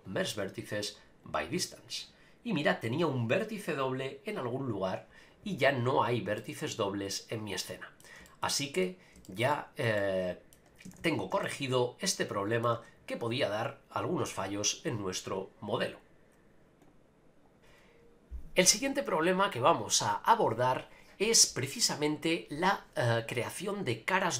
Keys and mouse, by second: 5.6 Tab, 6.4-8.0 middle drag, 8.2 shift+middle click, 8.5 middle click, 9.2 shift+middle click, 9.5 middle click, 10.0 middle click, 10.8 a, 11.0 a, 11.4-12.6 shift+middle drag.